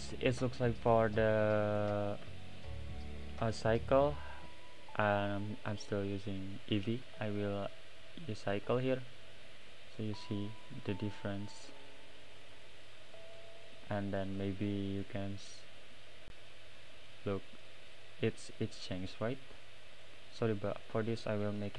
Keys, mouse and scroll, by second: 0.3 click, 0.9 click, 1.8 click, 4.5 click, 7.0-10.0 drag, 10.0-11.8 middle drag, 11.8-13.2 drag, 13.2-13.7 middle drag, 13.7 click, 14.4 click, 15.0 click, 16.8-17.8 middle drag, 17.8 click, 19.9 click, 21.0 click.